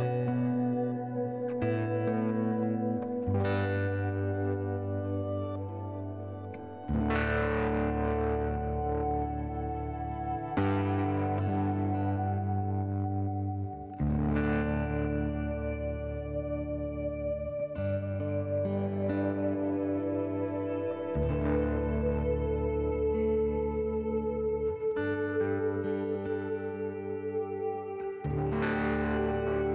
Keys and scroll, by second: 0.0-0.7 typing, 14.0 ctrl+s.